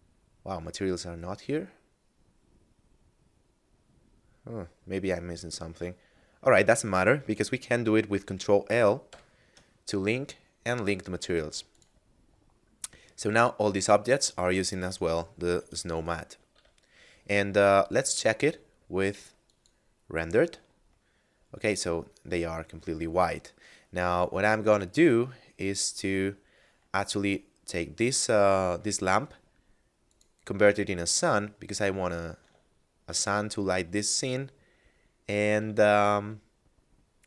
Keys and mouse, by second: 11.7 click, 13.4 right click, 16.5 a, 18.3 click, 22.8 middle click, 25.8 right click, 27.7 middle click, 30.0 click, 32.8 shift+middle click, 34.7 middle click, 35.9 r, 36.2 z.